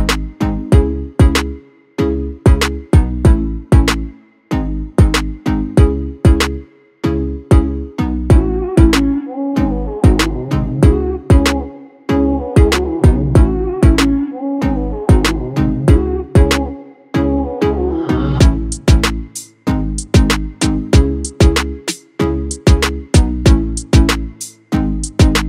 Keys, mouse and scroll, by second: 0.1 space, 0.4 ctrl+click, 3.5 F7, 7.1 F7, 9.2 click, 15.5 click, 19.6 click, 20.5-22.7 typing, 24.5 typing, 25.3 click.